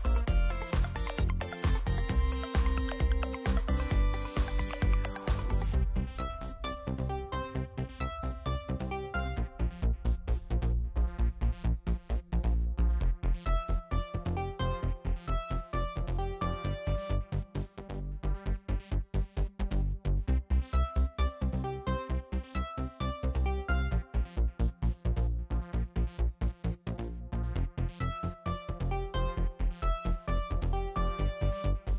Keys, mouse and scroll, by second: 2.1 click, 3.9-7.2 drag, 7.3-9.6 drag, 9.8-11.4 drag, 11.5 click, 12.9 click, 14.7 click, 16.0 click, 16.8 click, 18.8 click, 20.6 click, 21.8 click, 25.8 click, 26.5 click, 28.5 click, 29.8 click, 30.9-31.5 scroll down 1.